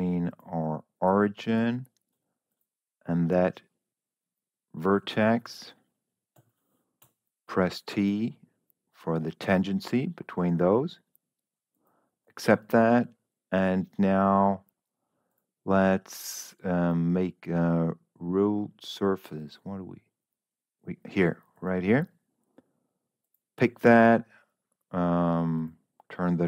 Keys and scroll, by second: 6.7 Escape, 6.9 t.